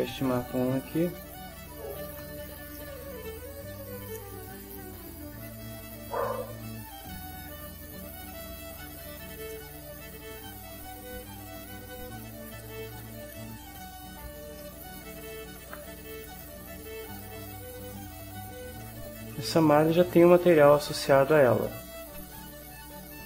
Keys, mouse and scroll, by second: 0.4 click, 2.7-7.7 middle drag, 9.4 click, 10.4 click, 13.1-14.1 drag, 14.6 middle click, 16.2-19.4 right drag, 19.9 ctrl+click, 21.0 ctrl+middle click, 21.2 click, 21.2 middle click, 21.7 right click, 22.6-23.2 ctrl+right drag.